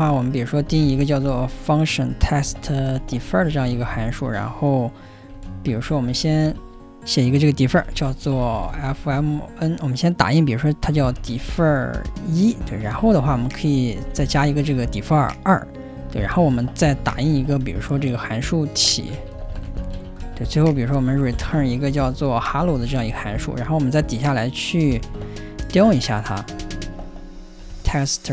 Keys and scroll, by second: 0.0-0.1 typing, 1.6-22.3 typing, 24.8-28.3 typing, 26.6 ctrl+n.